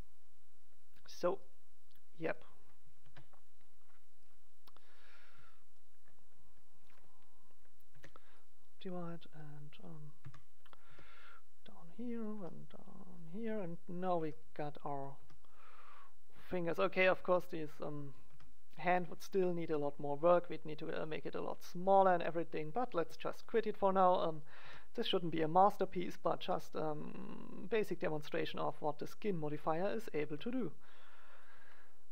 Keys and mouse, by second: 1.4-3.1 drag, 2.2 right click, 3.1 ctrl+a, 4.3 click, 5.0 middle click, 6.0 right click, 7.8 w, 9.3 right click, 10.2 KP_1, 10.8 g, 11.0 right click, 12.2-14.1 drag, 12.3 g, 14.1 g, 15.1 g, 16.2 click, 17.2 g, 18.2 g, 18.4-20.8 middle drag, 19.6 g, 21.8 middle click, 21.9 g, 22.9 g, 24.6 g, 25.2 click, 25.6 click, 26.2-27.6 drag, 26.3 g, 27.8-29.5 drag, 28.3 g, 29.6 click, 30.1 click, 30.2 g.